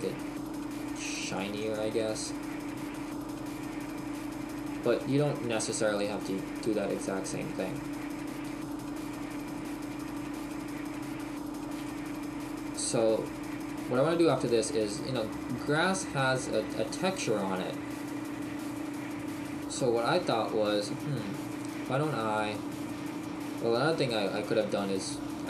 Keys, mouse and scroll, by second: 3.3 middle click, 7.8-8.3 scroll down 2, 8.9 shift+middle click, 11.4 shift+middle click, 11.8 shift+middle click.